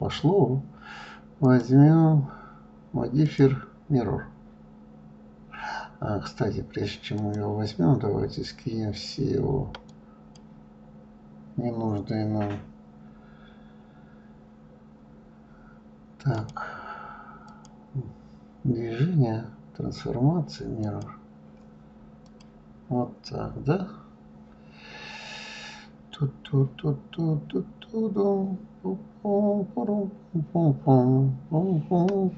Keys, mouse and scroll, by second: 1.9 click, 3.7-6.7 drag, 7.5 click, 10.3-13.7 drag, 16.8 click, 17.9-20.9 drag, 22.7 click, 24.1 scroll up 1.